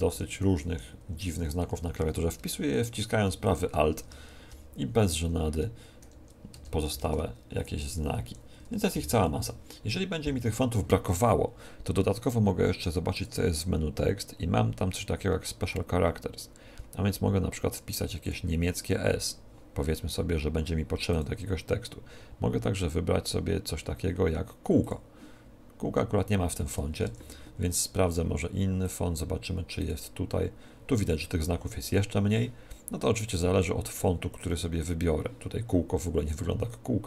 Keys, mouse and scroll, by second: 0.0-4.0 typing, 6.0 shift+Return, 6.5 Return, 7.4-9.2 typing, 13.1-14.9 drag, 21.0-22.9 drag, 27.0 Tab, 28.8-30.8 drag, 33.3-35.1 drag.